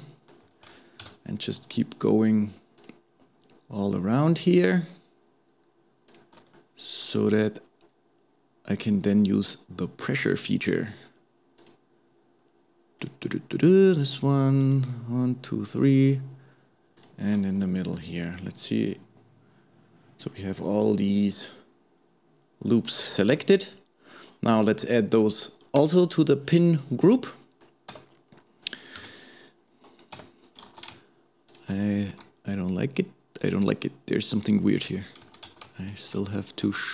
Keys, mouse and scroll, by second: 1.0 KP_7, 2.8 alt+shift+click, 4.5 alt+shift+click, 6.1 alt+shift+click, 6.5-9.4 shift+middle drag, 9.4 alt+shift+click, 11.6 alt+shift+click, 13.0 alt+shift+click, 14.6 alt+shift+click, 15.8 alt+shift+click, 17.0 alt+shift+click, 17.5-18.0 scroll down 1, 18.0-21.0 middle drag, 23.3 KP_7, 24.1-25.8 scroll up 2, 25.8-26.8 drag, 26.8 scroll down 2, 27.1 middle click, 27.9 Tab, 28.3-29.0 scroll up 1, 29.0 KP_1, 29.6-30.2 scroll up 1, 30.2 Tab, 31.5 alt+shift+click, 32.1 s, 35.5 alt+a.